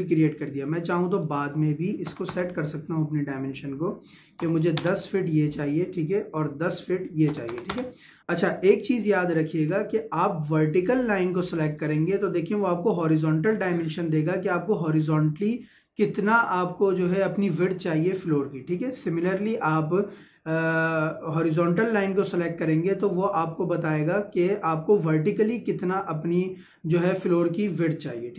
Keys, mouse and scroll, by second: 1.2 click, 4.4 ', 4.8 Return, 6.7 click, 8.2-8.8 scroll down 1, 11.0-11.4 scroll up 1, 11.7 click, 19.1 Escape, 21.6-24.2 drag.